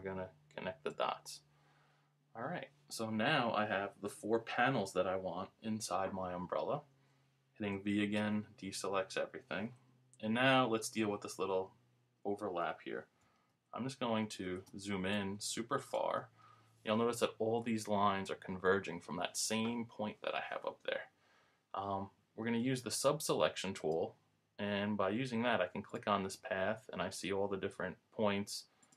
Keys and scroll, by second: 13.5 super+=.